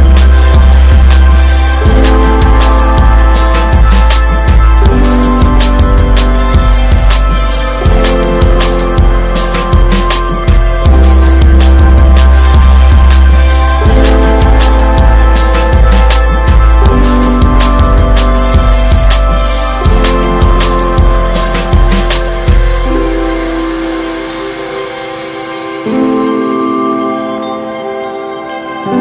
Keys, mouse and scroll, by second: 0.3 click, 1.1 ctrl+s, 1.3 Tab, 1.6 Tab, 2.0 click, 2.4 /, 2.7-3.4 scroll down 6, 3.0 click, 3.7 Tab, 4.3 Tab, 4.5 click, 4.8 ctrl+s, 5.1 click, 5.6-5.9 alt+middle drag, 6.2 scroll down 4, 6.5 shift+d, 7.5 drag, 8.0 scroll up 1, 8.6 click, 9.5-9.9 scroll up 4, 9.7 shift+middle drag, 10.1 s, 12.0 middle drag, 12.3 ctrl+s, 12.6 shift+middle click, 13.4 alt+middle click, 14.2-16.1 drag, 16.1 middle click, 16.4 ctrl+s, 16.5 scroll up 3, 17.5 shift+click, 18.3 ctrl+z, 20.1 click, 20.6 click, 21.3 ctrl+s, 21.9 shift+click, 22.5 middle drag, 22.7-23.1 scroll up 2, 22.9 shift+middle drag, 23.3 ctrl+s, 23.5-24.1 drag, 24.4 shift+click, 25.1 click, 25.4 drag, 25.8 alt+middle drag, 26.3 ctrl+s, 26.6 alt+z, 26.8 scroll up 2, 27.1-27.6 shift+middle drag, 27.6-28.9 drag, 28.9 r.